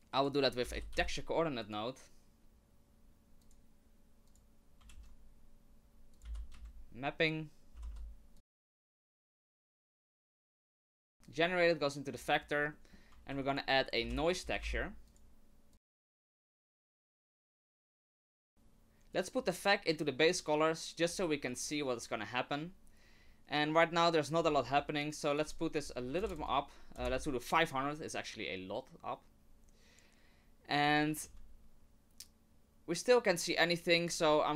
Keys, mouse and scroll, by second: 4.9 shift+a, 7.9 p, 8.8 middle click, 8.9-9.2 scroll down 9, 9.2 click, 9.7 click, 10.3 click, 10.6 click, 10.8 scroll up 6, 11.2 click, 12.7 middle click, 13.2 shift+a, 15.9 click, 16.2 click, 16.8 middle click, 17.1 middle click, 19.1 click, 24.4-25.6 scroll up 6, 25.3 click, 26.4 KP_0, 30.7 click, 31.2 shift+a.